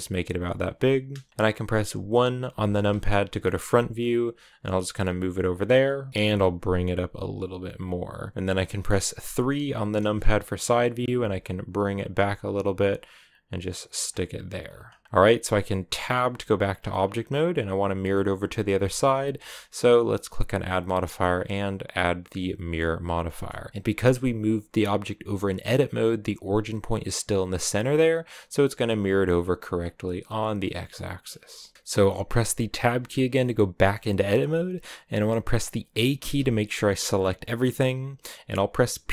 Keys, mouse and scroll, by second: 2.3 KP_1, 3.3 shift+middle click, 3.9 g, 9.8 KP_3, 10.4-10.8 scroll up 1, 10.8 g, 13.9-14.4 scroll down 4, 14.4-15.0 scroll up 1, 15.0-16.2 middle drag, 16.2 Tab, 17.9-22.6 middle drag, 22.6 click, 23.1 middle click, 23.7 g, 28.6-30.0 middle drag, 30.0 click, 30.7-32.7 middle drag, 32.7 Tab, 33.2-35.0 shift+middle drag, 35.0 a, 36.0 a.